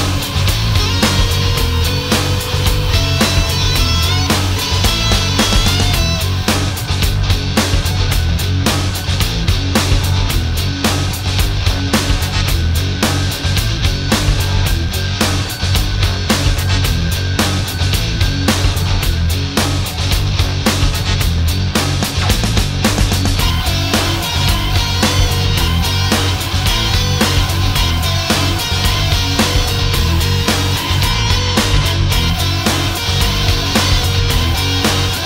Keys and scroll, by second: 10.4 alt+space, 15.0 alt+space, 31.9 alt+space.